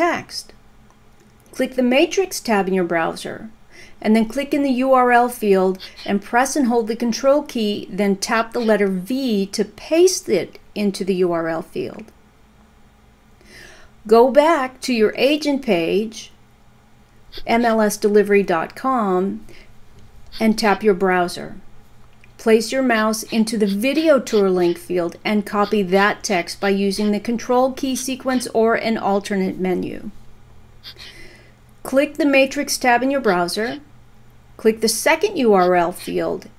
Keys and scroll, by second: 1.2 ctrl+a, 3.5 ctrl+c, 10.6 ctrl+v, 15.3 Return.